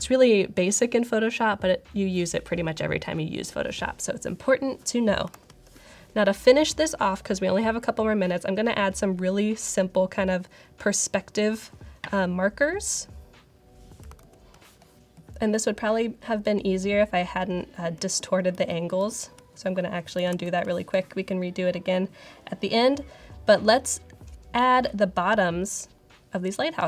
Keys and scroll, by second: 5.2 super+=, 14.1 super+-, 18.0 super+z, 18.4 super+z, 20.2 super+=.